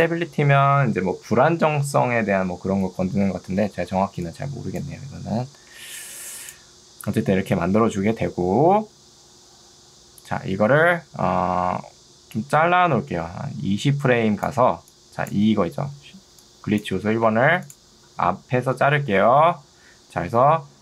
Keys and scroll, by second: 2.5 Escape, 4.1 ctrl+2, 5.7 Escape, 14.9 2, 17.3 Escape.